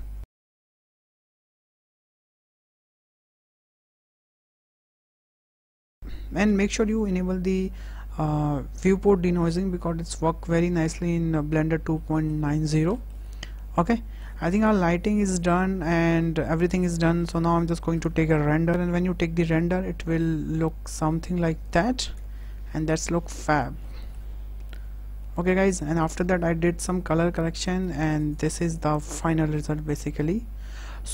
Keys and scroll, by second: 0.7-2.9 typing, 4.3 shift+d, 4.3 y, 4.9 w, 5.6 KP_0, 17.8 KP_0, 20.8 Tab.